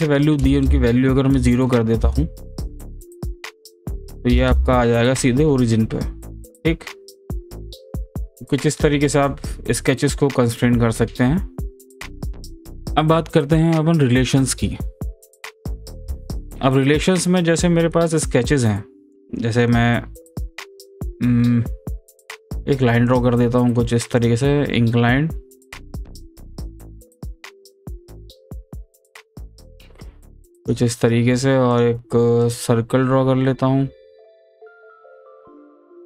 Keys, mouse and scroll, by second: 3.6 click, 9.2-12.4 drag, 18.2 click, 19.1 click, 21.4-23.1 drag, 27.9-30.6 drag, 32.4 click, 34.6-36.0 drag.